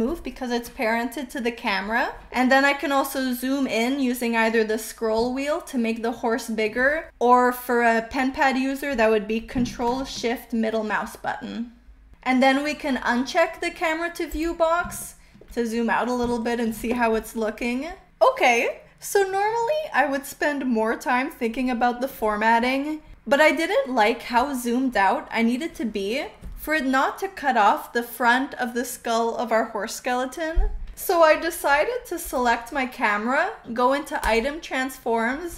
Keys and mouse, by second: 5.4-6.9 shift+middle drag, 10.0-11.9 ctrl+shift+middle drag, 14.2 click, 14.9 shift+middle click, 16.3-16.7 shift+middle drag, 17.9 space, 32.2 click, 34.2 click.